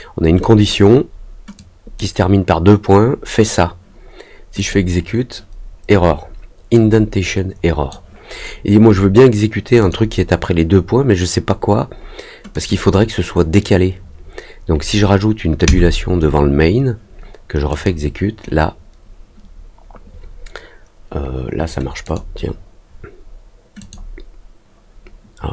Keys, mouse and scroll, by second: 0.3 click, 1.5 click, 4.5 click, 6.7-7.8 drag, 9.7 click, 12.5 click, 17.6 click, 22.0 click, 23.7 click.